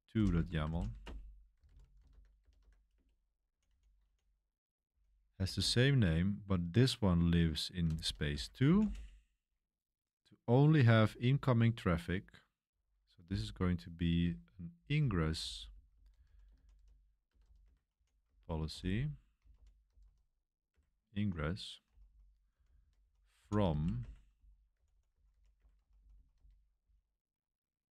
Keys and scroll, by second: 0.0-5.5 typing, 7.7-9.3 typing, 10.6-11.3 typing, 12.6-13.2 typing, 15.0-26.0 typing.